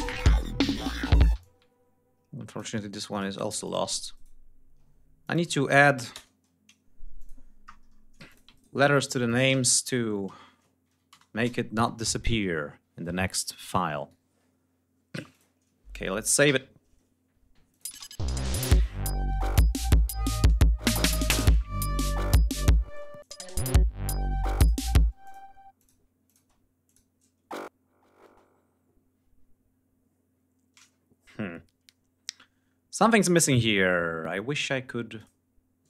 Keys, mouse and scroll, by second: 0.0 shift+right click, 0.6 shift+click, 1.1 shift+space, 1.2-2.6 ctrl+shift+drag, 2.9 click, 3.4 ctrl+click, 3.9 ctrl+right click, 5.0 ctrl+click, 5.2 ctrl+a, 5.9 Return, 6.9-7.5 drag, 8.1-8.7 ctrl+drag, 8.3 ctrl+right click, 9.0 ctrl+click, 9.2 space, 9.3 a, 10.7 Left, 10.9 BackSpace, 11.2 Return, 13.3 click, 15.1 click, 16.2 ctrl+s, 17.5 click, 17.7 space, 18.2 ctrl+scroll down 2, 20.1-20.6 scroll down 2, 20.6-21.0 scroll up 2, 21.2 scroll down 2, 22.1 scroll up 2, 22.7 space, 23.0 ctrl+click, 23.3 ctrl+scroll up 2, 23.5 ctrl+scroll down 2, 24.4 click, 24.9 space, 25.0 click, 25.5 click, 26.0 click, 26.2 space, 26.6 click, 28.0 space, 32.9 right click, 34.9 click.